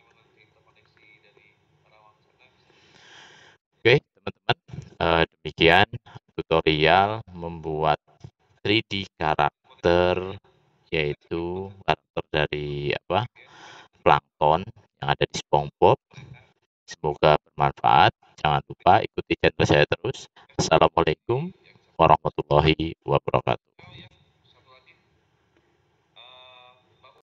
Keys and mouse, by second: 1.5 typing, 2.8 typing.